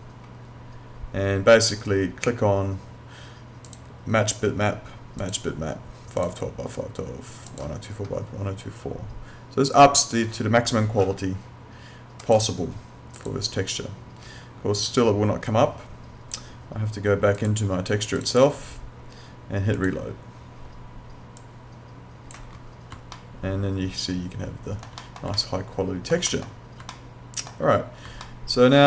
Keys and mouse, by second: 3.7 click, 12.3 click, 23.2 alt+middle click, 25.3 alt+middle click, 26.9 alt+middle click, 28.3 alt+middle click.